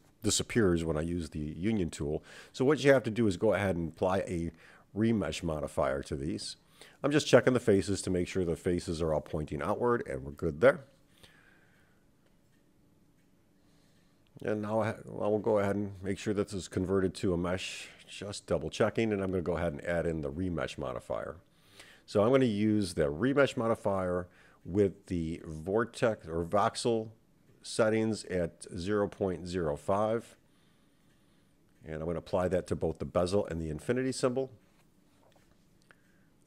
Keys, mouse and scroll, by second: 0.6 ctrl+a, 2.2 click, 2.8 ctrl+a, 4.8-6.7 drag, 7.9-9.5 drag, 9.9 x, 10.1-12.4 drag, 13.9 click, 14.3-16.0 right drag, 16.0 click, 18.1 click, 20.0-24.3 drag, 28.2 click, 29.1 click, 30.5-31.1 scroll down 5, 31.1-32.2 scroll up 3, 32.7-34.1 scroll up 3, 34.7 click, 35.4 click.